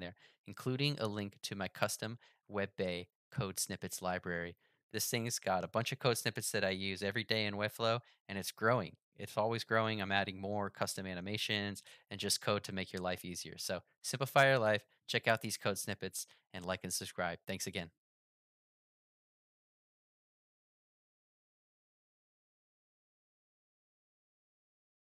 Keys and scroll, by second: 2.4 ctrl+1.